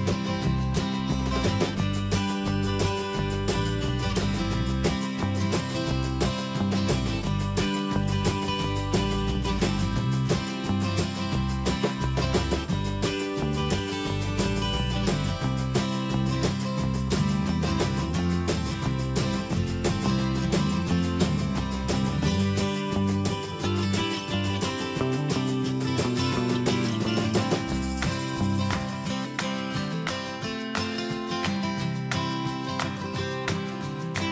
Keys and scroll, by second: 1.3 ctrl+shift+,, 9.0 alt+Right, 12.0 ctrl+Return, 18.3 ctrl+t, 22.8 ctrl+Return, 24.3 Escape.